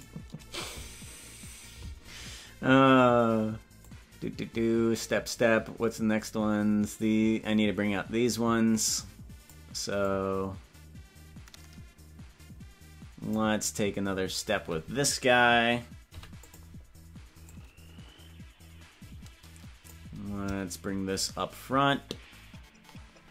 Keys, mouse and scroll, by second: 0.2 right click, 3.9-9.5 drag, 10.1-13.4 drag, 14.6 right click, 16.1 i, 17.5-19.9 drag, 21.1-23.3 shift+drag.